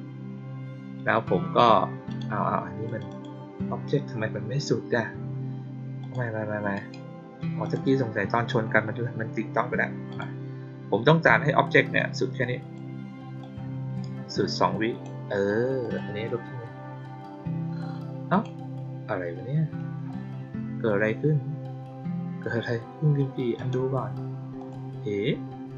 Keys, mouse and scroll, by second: 2.0 click, 2.8 click, 3.0 click, 5.9 click, 6.7 right click, 7.5 click, 10.0 click, 11.9 click, 13.3-14.9 drag, 15.7 click, 18.2 click, 19.3 middle click, 23.5 click, 24.5 click.